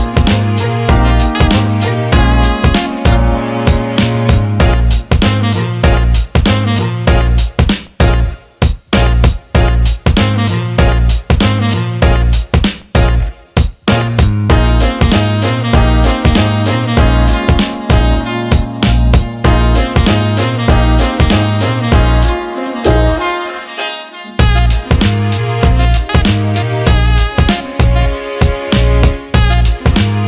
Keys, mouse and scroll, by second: 0.0 click, 2.8-5.3 ctrl+drag, 5.6 alt+middle click, 5.9 alt+shift+middle click, 6.7 alt+middle drag, 7.1 alt+shift+middle click, 7.5 ctrl+alt+middle click, 8.1 Tab, 8.9 click, 10.5 click, 10.9 middle click, 11.7 click, 11.9 click, 13.1 ctrl+b, 17.8-19.5 drag, 19.5 right click, 20.8 alt+middle click, 21.8 alt+middle click, 22.7 drag, 23.1 alt+shift+middle drag, 23.6-25.8 alt+middle drag, 23.8 alt+right click, 28.3 click, 29.5 shift+d.